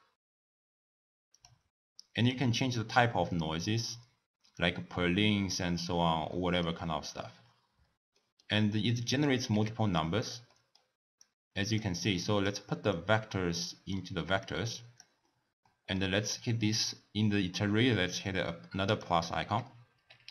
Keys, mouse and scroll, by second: 2.2-6.4 drag, 6.4-7.7 middle drag, 7.7 scroll down 1, 8.2 middle click, 8.8 click, 9.6 g, 10.2 click, 10.5 middle click, 11.3 click, 12.2 drag, 13.0-14.5 drag, 15.7-18.7 middle drag, 18.9-20.3 drag.